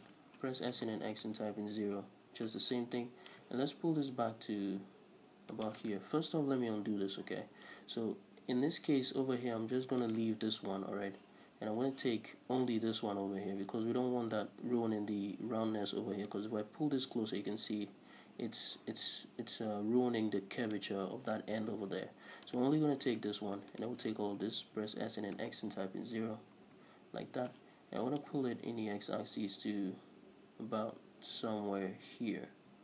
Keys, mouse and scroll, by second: 0.6 s, 2.0 Return, 3.4-5.7 drag, 5.7 shift+right click, 6.1 ctrl+z, 10.1 shift+right click, 16.4 right click, 21.6 ctrl+z, 22.6 right click, 23.8 alt+shift+right click, 24.7 s, 28.3-32.8 drag.